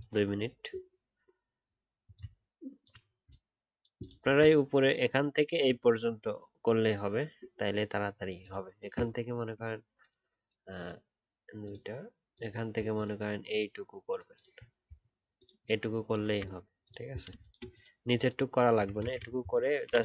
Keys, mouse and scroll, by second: 3.0 alt+scroll up 1, 4.2-5.1 alt+scroll up 3, 10.0 alt+click, 15.3 alt+click, 19.0 ctrl+z.